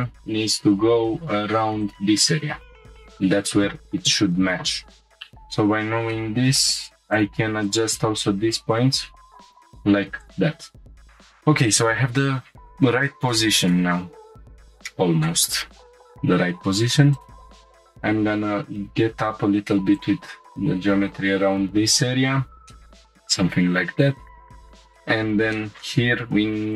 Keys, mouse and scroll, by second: 0.0 y, 1.8 click, 5.0 shift+middle click, 5.0 scroll down 3, 6.1 middle click, 6.7 scroll down 1, 7.1 click, 7.6 shift+click, 8.7 click, 9.4 g, 9.4 z, 9.4 y, 9.4-10.9 drag, 10.9 scroll down 1, 10.9 g, 10.9 y, 11.1 click, 11.7-12.4 scroll down 3, 12.9 scroll up 2, 13.3 shift+middle click, 15.9 click, 17.1 ctrl+click, 17.8 g, 18.1 z, 20.0 shift+click, 20.7 scroll up 1, 22.3 scroll down 2, 22.7 shift+middle click, 23.0 scroll down 1, 23.3 scroll up 1, 24.3 scroll up 1, 24.6 middle click, 24.9 shift+middle click, 25.5 middle click.